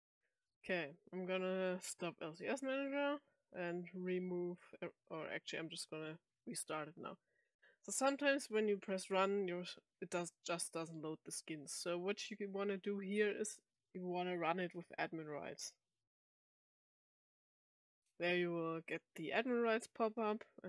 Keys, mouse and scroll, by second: 1.9 click, 4.5 click, 5.1 click, 8.6 click, 8.8 click, 16.1 click.